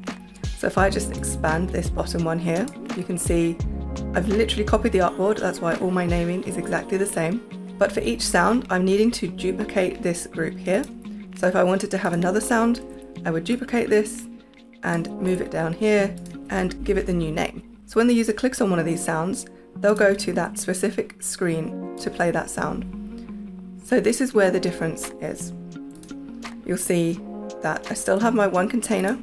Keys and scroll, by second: 12.8 super+d, 16.7 l, 20.0 space.